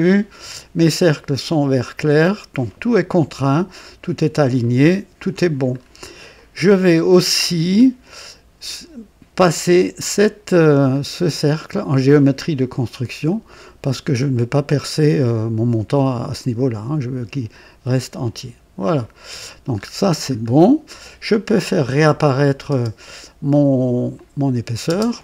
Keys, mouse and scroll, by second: 0.0-0.6 right drag, 4.5-5.2 right drag, 5.7 scroll up 1, 6.3-6.9 right drag, 7.4 scroll up 2, 9.9 click, 10.9-11.2 scroll down 2, 13.2 click, 18.7 click, 19.7-20.6 scroll up 4, 22.3 click, 22.6 space, 23.4 click, 24.1 click, 24.8 space.